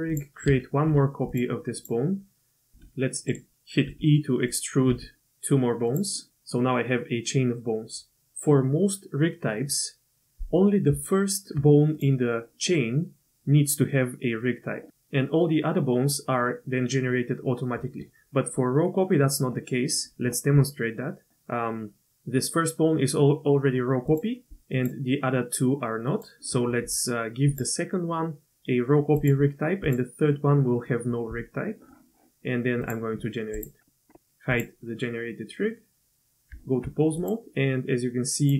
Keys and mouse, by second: 0.7 shift+d, 1.8 click, 2.7 r, 3.9 e, 4.9 e, 10.9 Tab, 11.9 click, 24.1 click, 24.7 click, 26.1 click, 27.5-29.3 drag, 32.8 click, 34.5 click, 36.5 Tab, 37.2 click, 38.4 click.